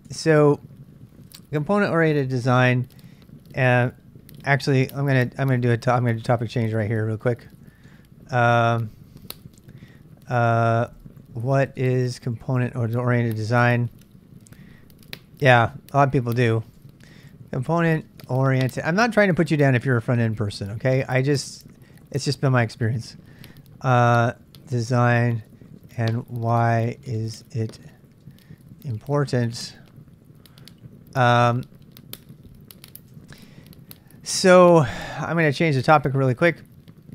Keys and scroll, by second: 0.1 Return, 4.4 typing, 5.7 ctrl+[, 5.8-14.5 typing, 7.2 ctrl+c, 16.3-22.0 typing, 24.0-30.0 typing, 31.0-31.5 typing, 32.8-35.9 typing.